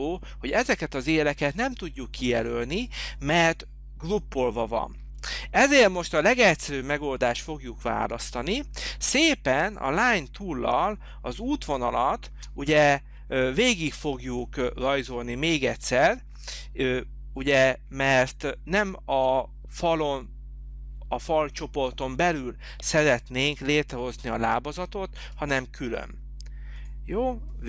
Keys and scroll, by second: 5.4 h, 12.4 space.